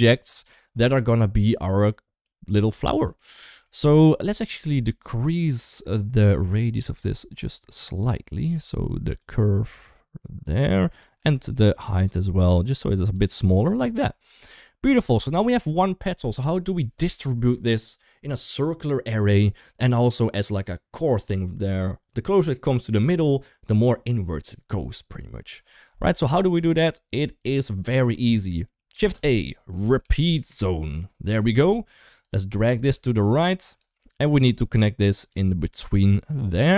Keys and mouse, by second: 2.2 middle click, 2.8 middle click, 3.3 middle click, 3.8 middle click, 6.3 middle click, 9.1-10.8 shift+drag, 11.7-12.9 shift+drag, 13.7 shift+middle click, 14.5 shift+middle click, 15.0 shift+middle click, 27.2 click, 28.2 middle click, 28.8 shift+a, 32.0 drag, 32.6 g, 33.9 shift+middle click, 34.7 click, 35.5 middle click, 36.1-36.7 drag.